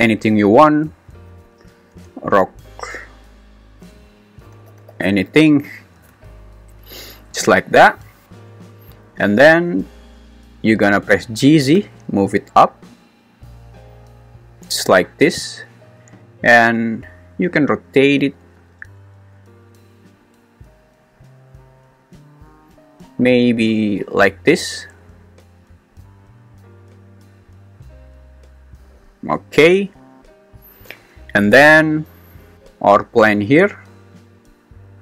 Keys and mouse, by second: 5.0 3, 9.5 `, 11.4 g, 11.8 z, 17.3 r, 19.4 Escape, 20.2 r, 34.1 click.